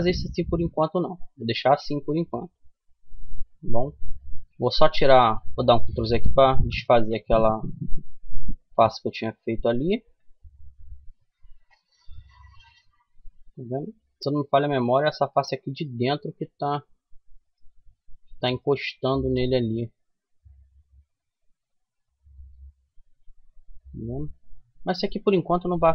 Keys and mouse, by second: 0.6-3.9 middle drag, 2.6 Tab, 5.0 ctrl+z, 5.5 ctrl+z, 5.9 ctrl+z, 6.3 ctrl+z, 6.8 ctrl+z, 7.5 middle click, 9.0 middle click, 9.4 Tab, 10.3 middle click, 11.0 middle click, 12.5-14.0 right drag, 14.0 click, 14.5-17.6 middle drag, 18.6-20.4 middle drag, 24.8 ctrl+z.